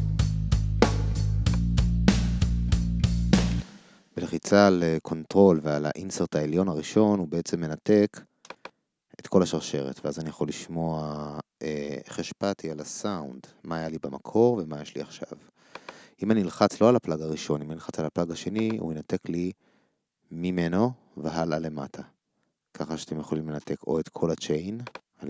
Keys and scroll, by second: 3.5 ctrl+space.